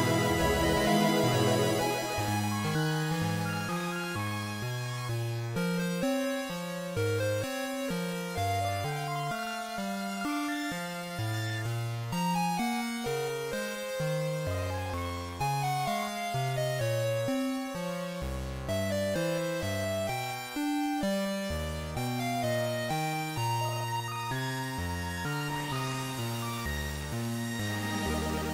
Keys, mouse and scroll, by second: 1.3 click, 1.6 r, 4.9 click, 5.6 w, 14.0 click, 20.0 click, 22.3 right click, 26.4 click.